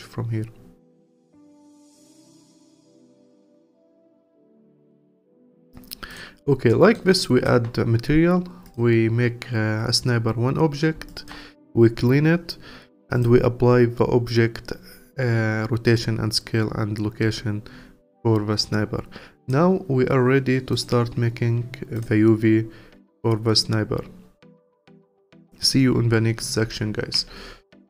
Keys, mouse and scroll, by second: 0.6-1.7 scroll up 22, 2.5-5.8 drag, 5.8-6.1 scroll up 1, 6.1 click, 6.7 alt+middle click, 7.1-8.7 alt+drag, 11.1-16.3 alt+drag, 19.4 click, 19.9-20.7 scroll down 1, 20.7 click, 21.9-25.0 drag.